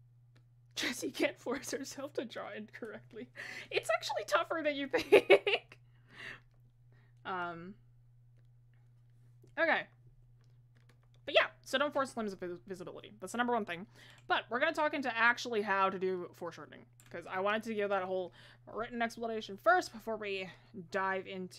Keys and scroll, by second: 20.0 ctrl+z.